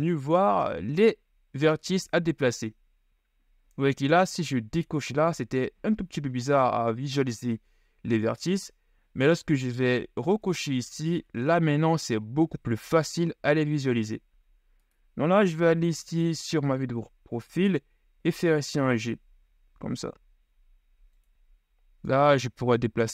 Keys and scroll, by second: 15.8 KP_3, 17.1 z.